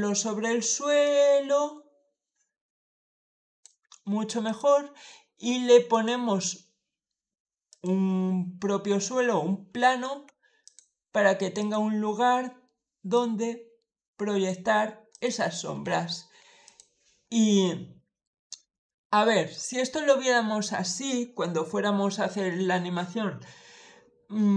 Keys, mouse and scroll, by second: 0.9-3.5 drag, 4.3 click, 5.8 click, 7.6 click, 9.1 middle click, 9.1-9.4 scroll down 1, 9.6 s, 10.5 click, 11.4 click, 13.0-14.3 drag, 15.0 click, 15.7 s, 16.5 click, 17.1 middle click, 17.8-18.5 scroll up 4, 17.9 middle click, 18.7 shift+middle click, 24.1-24.5 scroll down 2.